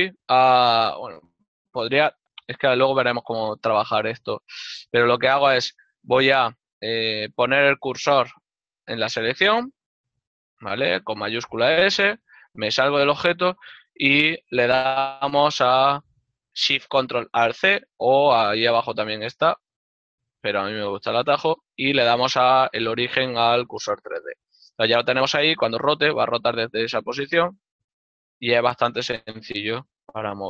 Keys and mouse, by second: 8.0 shift+s, 8.9 click, 12.3 Tab, 14.3 click, 23.7 click, 25.2 r, 29.7 z.